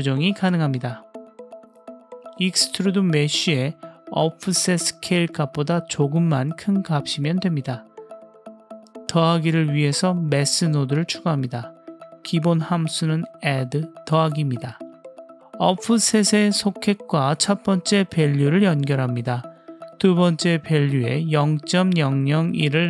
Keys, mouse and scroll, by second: 0.9 click, 1.5-2.7 drag, 2.8-3.7 middle drag, 4.6 shift+click, 5.4-6.1 middle drag, 6.9 middle click, 7.5 scroll up 1, 7.7 middle click, 8.7 click, 9.0 click, 9.7 shift+a, 10.2 BackSpace, 12.9 click, 16.7-17.4 drag, 20.2-21.7 drag, 21.3 KP_0.